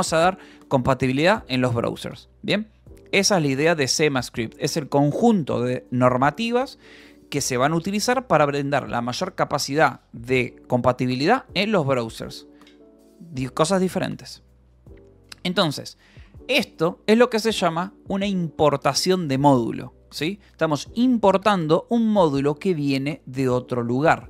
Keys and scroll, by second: 14.2 d, 14.4 Escape, 15.1 k, 15.9 j, 16.6 shift+v, 17.3 Escape, 18.9 Escape, 20.6 shift+v, 22.0 Escape.